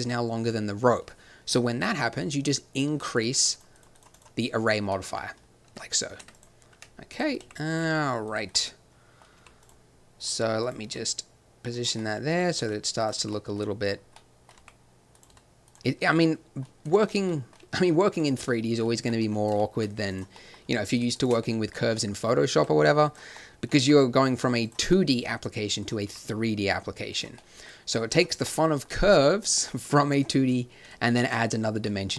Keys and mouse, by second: 0.4-5.4 drag, 5.7 Tab, 6.2 Tab, 6.7 Tab, 7.4 r, 7.8 g, 9.3 g, 10.9 g, 12.5 s, 13.1 r, 14.5 r, 15.3 s, 16.8 s, 17.6 g, 20.2 click, 21.0-22.0 drag, 21.2 right click, 22.5 r, 23.8 g, 26.0 g, 29.1 g, 30.1 click.